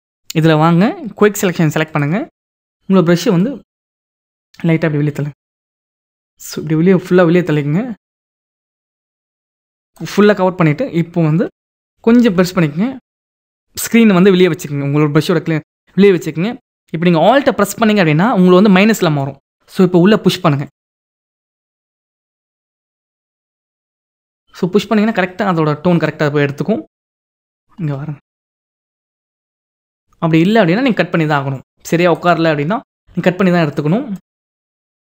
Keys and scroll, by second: 11.7 ], 12.2 ].